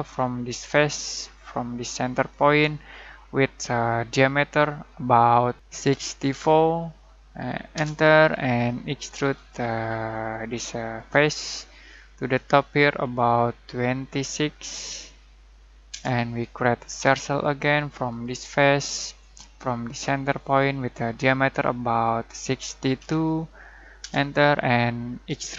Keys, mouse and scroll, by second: 0.5 click, 5.8-6.3 typing, 7.8 Return, 9.3 click, 9.5 click, 11.1 click, 14.2-15.4 typing, 15.9 Return, 17.0 c, 18.1 click, 22.3-22.9 typing, 24.1 Return, 25.2 e.